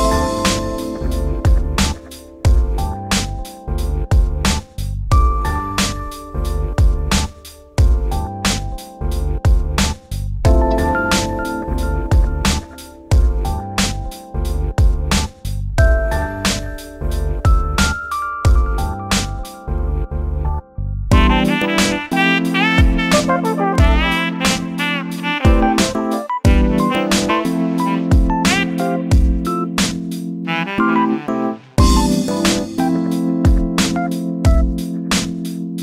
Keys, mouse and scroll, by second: 0.7 KP_7, 1.1 Tab, 1.8-3.5 shift+middle drag, 4.4 shift+click, 5.3 click, 6.7 click, 6.9 click, 7.4 click, 7.6 click, 8.0 click, 8.2 click, 9.1 click, 9.7 click, 9.9 click, 10.5 click, 10.7 click, 11.6 click, 12.3 shift+click, 12.9 KP_7, 13.5-13.9 shift+middle drag, 13.9 Tab, 14.4-15.1 shift+middle drag, 15.1-17.2 drag, 18.0-19.3 middle drag, 19.3 click, 19.8 x, 20.4 click, 20.7 Tab, 21.0 middle drag, 21.2-21.7 scroll up 4, 21.7 middle drag, 22.0 3, 22.2 click, 22.5 click, 22.9 drag, 23.1 click, 23.3 click, 23.6 scroll down 1, 23.9 middle click, 24.4-24.9 scroll down 2, 24.9 click, 25.3 shift+click, 25.9 shift+click, 26.2-26.6 scroll up 8, 26.6 shift+click, 27.0-28.0 shift+middle drag, 28.0 shift+click, 28.3 shift+click, 28.5 shift+middle click, 29.0 shift+click, 29.3 shift+click, 29.6 shift+middle click, 29.9 shift+click, 30.2 shift+drag, 30.5 shift+click, 30.7-31.2 shift+middle drag, 31.2 shift+click, 31.6 shift+click, 32.1 shift+click, 32.6 shift+middle click, 33.0 shift+click, 33.2 scroll down 2, 33.4-33.8 shift+middle drag, 33.8 shift+click, 34.4 shift+click, 34.8 shift+click, 35.3 shift+click, 35.7 shift+click.